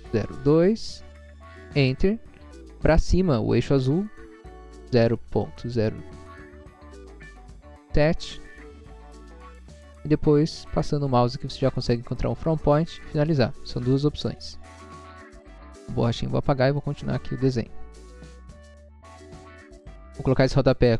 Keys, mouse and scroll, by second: 0.1 0, 0.8 2, 1.9 Return, 4.9-5.3 typing, 7.3 0, 7.9 7, 8.8 Return, 9.5 scroll up 1, 12.0 click, 13.0 click, 13.7 middle click, 14.5 middle click, 15.0 click, 15.7 click, 16.3 click, 16.9 click, 17.2 scroll down 1, 18.3 scroll up 1, 18.9 scroll up 1.